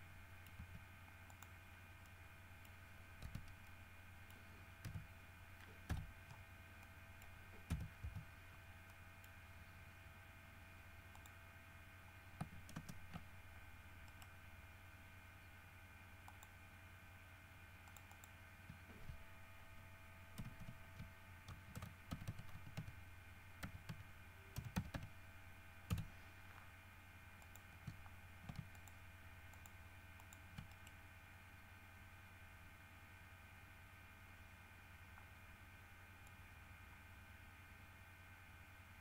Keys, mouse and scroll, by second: 0.1 ctrl+middle click, 0.8 z, 1.5 middle click, 1.9 scroll down 1, 2.2 middle click, 3.4 Tab, 3.8 middle click, 5.0 KP_5, 6.1 KP_5, 7.0 middle click, 7.9 KP_5, 9.1 middle click, 11.3 click, 12.9 ctrl+space, 14.3 right click, 16.5 click, 18.0 click, 20.6 shift+b, 20.8 shift+g, 21.9-25.1 typing, 26.1 Return, 27.6 click, 29.0 ctrl+shift+click, 29.7 shift+click, 30.4 shift+click, 30.9 shift+right click, 36.4-39.0 drag.